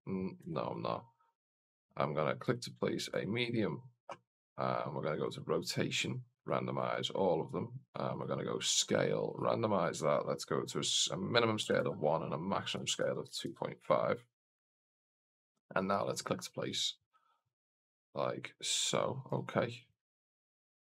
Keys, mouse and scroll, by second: 1.4 right click, 2.3-3.1 drag, 5.0 click, 5.5 scroll down 1, 6.3 click, 6.3 scroll down 1, 6.5 click, 6.8 click, 7.7 click, 8.0 click, 9.1 click, 9.6-13.8 drag, 15.5 click, 16.5 click, 16.9 click, 17.4 click, 19.1 click, 19.6 click, 20.2 click, 20.7 click.